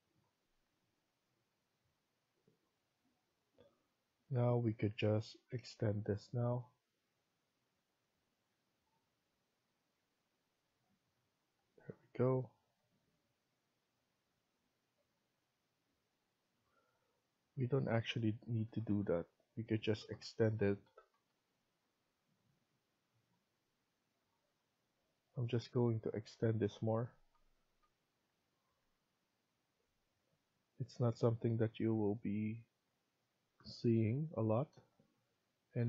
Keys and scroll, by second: 8.5 Escape, 9.9 Escape, 18.3 ctrl+z, 18.5 ctrl+z, 18.9 ctrl+z, 19.7 ctrl+z, 27.1 ctrl+z, 27.5 ctrl+z, 28.5 Escape, 33.2 Escape.